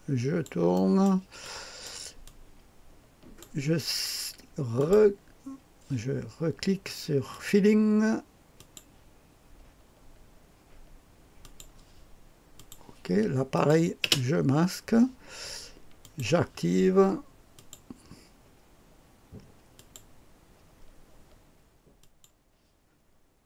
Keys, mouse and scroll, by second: 0.7 click, 0.7 right click, 1.3 click, 1.3 right click, 2.2-3.3 drag, 4.7 click, 7.2 click, 8.5 click, 11.3 click, 11.8 click, 12.5-16.4 drag, 13.9 space, 17.5 click, 19.7 click, 21.9 click.